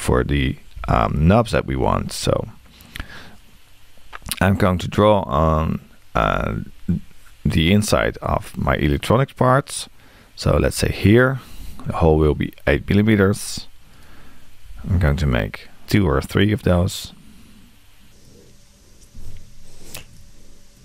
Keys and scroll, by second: 11.9 8.